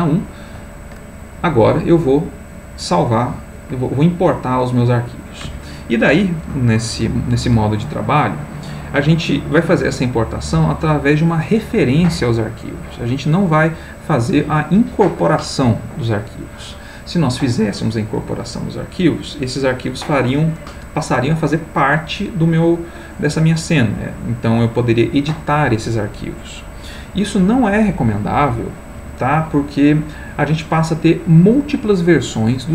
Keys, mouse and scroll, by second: 1.5 click.